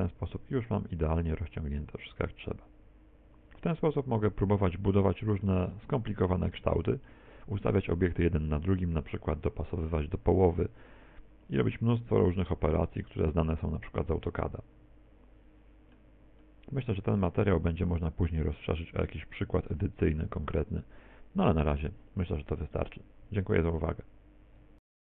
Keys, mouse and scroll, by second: 4.8-5.1 scroll down 2, 5.1 middle click, 6.6 middle click, 7.5 shift+middle click, 7.8 shift+middle click, 13.6 Tab, 14.4 middle click, 16.4 middle click, 18.3 click.